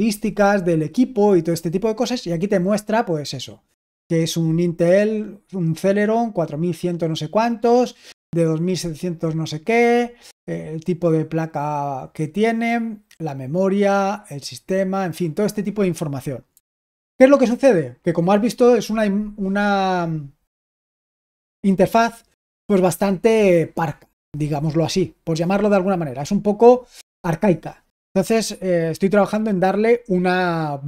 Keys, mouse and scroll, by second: 16.7 super+w.